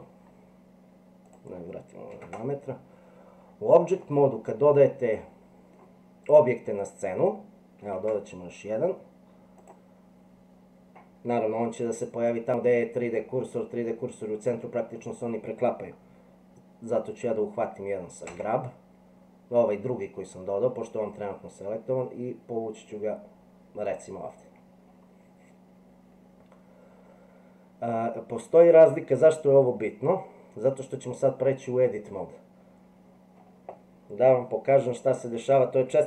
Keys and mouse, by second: 1.2-3.1 drag, 4.1-5.8 drag, 4.1-5.8 right drag, 7.9 shift+a, 18.3 g.